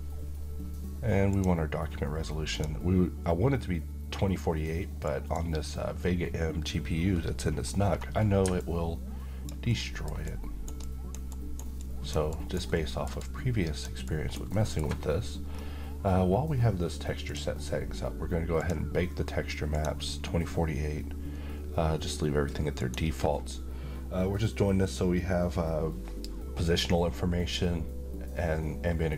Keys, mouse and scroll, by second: 4.7 click, 7.6-7.9 scroll down 1, 8.3-9.2 alt+click, 9.3-10.8 alt+middle click, 10.0 alt+right click, 10.5 alt+click, 10.9 alt+right click, 11.4-12.3 alt+click, 11.9 alt+right click, 12.4 alt+middle click, 12.9-14.0 alt+click, 13.7 alt+right click, 14.2 alt+middle click, 15.2-17.0 scroll down 1, 17.0 click, 22.4 click.